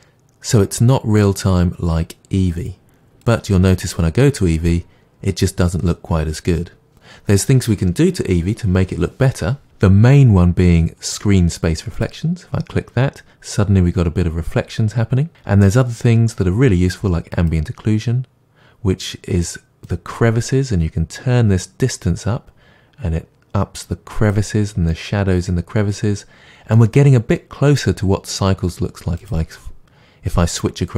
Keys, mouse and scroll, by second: 2.5-12.0 drag, 17.4 click, 20.1-25.0 drag, 25.0-30.9 middle drag.